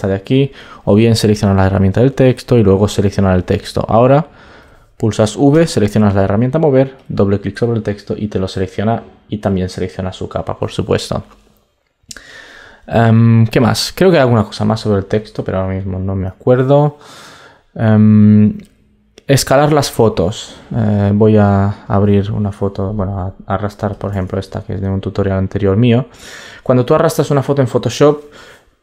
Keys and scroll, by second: 24.1 super+Tab.